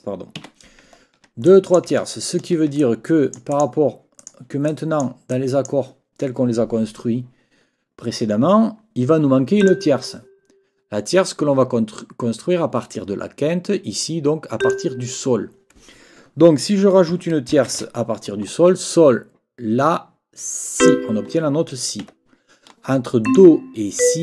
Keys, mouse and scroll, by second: 0.4 Escape, 1.0 ctrl+scroll down 2, 1.4 ctrl+click, 2.0-2.6 ctrl+scroll up 4, 2.8 ctrl+click, 3.0-3.8 ctrl+scroll up 2, 3.1 ctrl+click, 4.2 scroll up 1, 4.7 click, 4.7 scroll up 1, 4.8 click, 5.3 click, 5.4 scroll up 1, 5.5 click, 9.6 click, 14.6 click, 17.1 n, 17.7 shift+-, 20.8 click, 22.0 Escape, 23.2 click, 24.0 click.